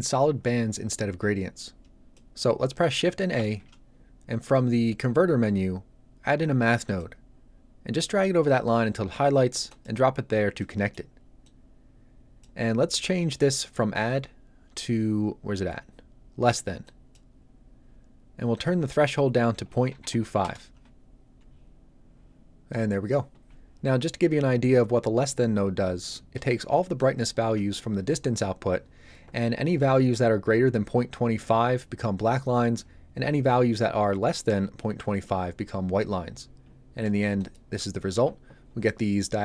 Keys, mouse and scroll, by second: 1.7-2.1 scroll down 1, 2.1 middle click, 3.3 shift+a, 6.8 click, 10.5 middle click, 10.9 scroll down 1, 11.1 scroll up 1, 11.4 click, 16.8 click, 19.8 KP_2, 20.0 KP_5, 20.4 Return, 26.9 ctrl+shift+click, 37.3 ctrl+shift+click.